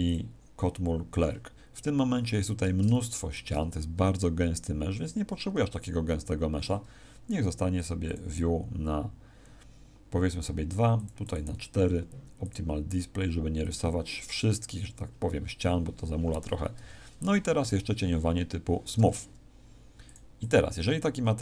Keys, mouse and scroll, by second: 2.0-3.1 scroll up 5, 3.1 shift+middle click, 3.7-4.9 scroll up 5, 5.7-7.5 scroll up 1, 7.5 scroll up 2, 7.9 click, 8.1 click, 12.4 click, 13.6 click, 14.7-15.5 scroll down 2, 15.5-15.9 scroll down 6, 16.7 Tab, 16.7-17.7 scroll down 3, 18.9 Tab, 20.0 click, 20.3 click, 21.2-21.4 scroll down 2.